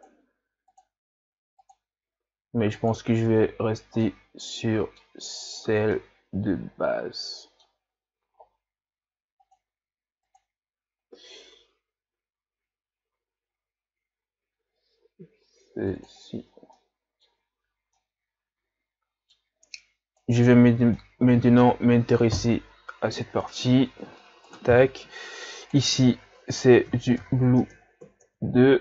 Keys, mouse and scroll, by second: 4.1-5.6 middle drag, 5.6-6.0 scroll down 5, 6.0-7.9 middle drag, 7.9-8.7 scroll up 7, 16.4-16.8 scroll down 4, 16.8-17.5 middle drag, 17.5 scroll up 3, 18.0-20.3 middle drag, 20.3 right click, 21.0-24.6 middle drag, 24.6-28.7 drag.